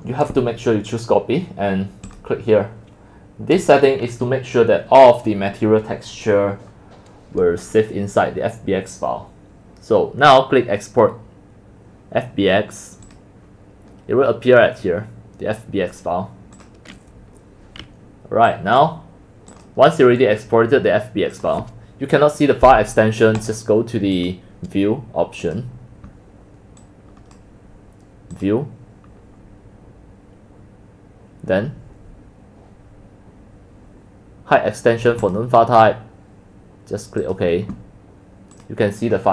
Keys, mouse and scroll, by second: 13.3 click, 16.6 click, 17.8 right click, 18.5 click, 19.5 click, 21.3 click, 23.4 click, 24.2-26.6 drag, 26.8 click, 29.2-30.5 middle drag, 29.2 scroll, 35.2 click, 37.2 click, 38.6 click.